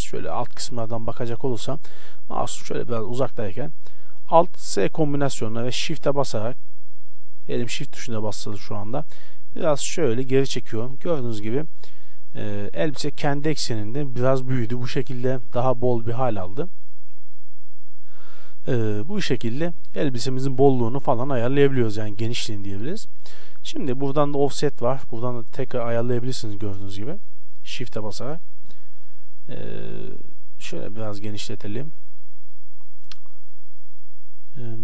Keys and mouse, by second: 0.5-4.8 middle drag, 4.8 alt+s, 10.6-12.7 middle drag, 14.8 middle click, 15.1-16.8 middle drag, 18.4-20.8 middle drag, 25.1-26.6 drag, 28.4-29.6 middle drag, 29.6 right click, 30.7-32.6 drag, 32.7 middle click.